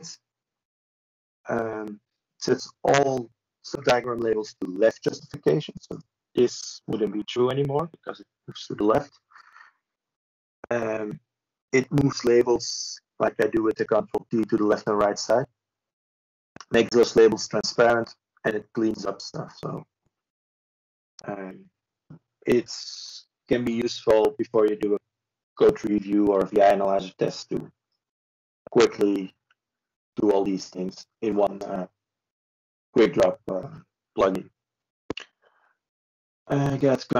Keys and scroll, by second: 16.6 ctrl+space, 17.5 typing, 20.0 typing, 21.6 ctrl+c, 25.0 ctrl+z, 28.8 ctrl+space, 30.1 typing, 31.4 ctrl+c.